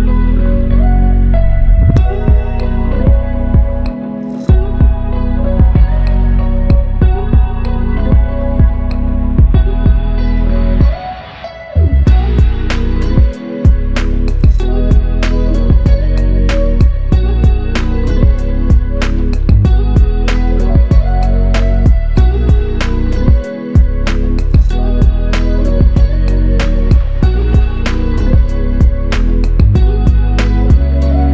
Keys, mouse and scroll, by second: 0.7 alt+click, 12.7 ctrl+alt+click, 15.2 ctrl+alt+click, 15.9 ctrl+click, 18.1 ctrl+click, 21.3 ctrl+click, 25.9 alt+click, 27.2 ctrl+click, 27.7 ctrl+click, 28.4 ctrl+click.